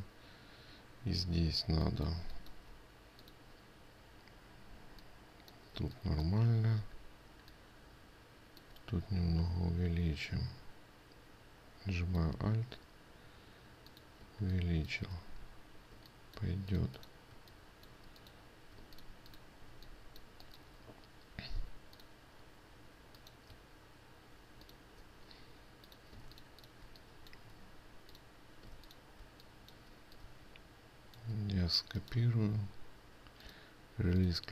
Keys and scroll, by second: 19.3 ctrl+space, 29.2 ctrl+space.